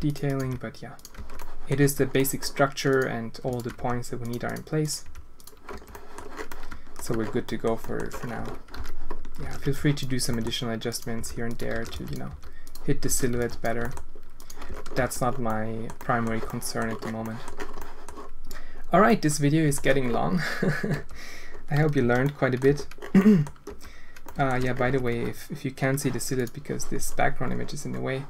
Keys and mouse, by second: 0.3 click, 0.4 g, 1.1 Tab, 1.3 click, 1.7 Tab, 2.1 click, 2.9 click, 3.7 g, 5.0 g, 5.7 Tab, 5.9 click, 6.4-6.9 alt+shift+drag, 7.4 drag, 7.7 alt+shift+drag, 8.3 Tab, 8.7-12.2 typing, 9.4 alt+a, 11.7 alt+a, 13.0 alt+a, 13.3 b, 13.7 g, 14.6 Tab, 14.9 z, 15.4-15.8 drag, 15.9 drag, 16.4 drag, 17.2 click, 17.7 click, 19.0-19.7 drag, 20.9 Tab, 21.9 a, 22.2-22.5 drag, 22.6 Tab, 23.2 click, 23.6 Tab, 24.2 alt+shift+click, 25.0 Tab.